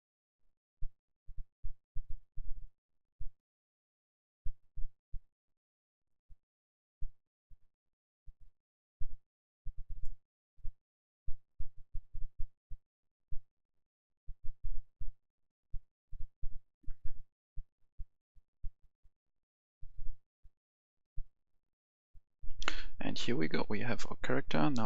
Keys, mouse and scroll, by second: 9.2-9.7 scroll down 1, 9.9 click, 10.4-11.9 scroll down 1, 11.9 click, 12.4-13.6 scroll up 1, 13.6 click, 16.9 KP_0, 21.7-22.5 scroll up 1, 22.5 F10, 23.5 click.